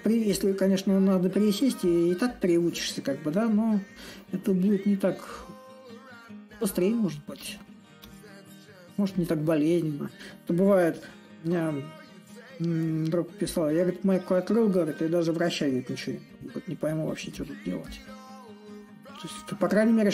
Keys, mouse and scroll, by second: 0.0-5.0 drag, 5.6 click, 8.9-10.6 drag, 10.6 s, 13.2-14.8 drag, 14.8 s, 16.0-20.1 drag.